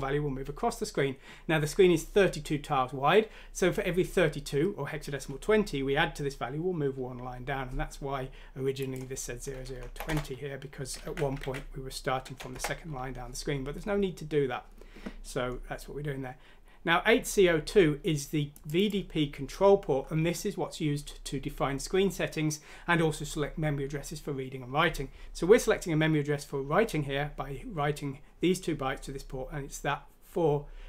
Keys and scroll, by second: 9.6-10.1 typing, 11.1 ctrl+z, 11.5 ctrl+z.